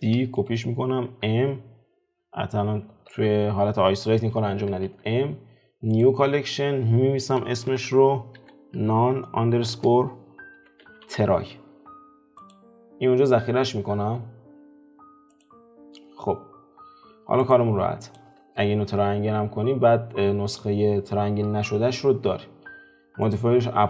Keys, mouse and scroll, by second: 2.9 alt+q, 15.3 click, 16.4 scroll up 2, 16.9-18.1 scroll down 4, 18.1 click, 18.4 alt+q, 20.5-22.3 scroll up 3.